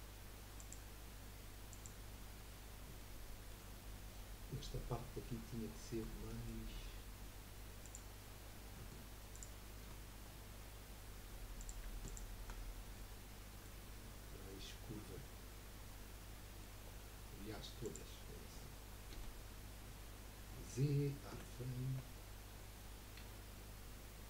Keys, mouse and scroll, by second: 0.6 click, 1.7 click, 2.3 scroll up 2, 3.0-7.8 shift+middle drag, 7.8 click, 8.3-9.1 scroll up 1, 9.3 alt+shift+click, 10.3-10.9 scroll up 2, 11.6 click, 12.0 shift+click, 12.6-12.9 scroll down 3, 12.9-16.0 middle drag, 16.3 middle click, 16.8-17.1 scroll down 4, 17.8 click, 19.1 KP_1, 20.6 z, 22.0-23.1 scroll down 1, 23.1 scroll down 1, 23.2 q.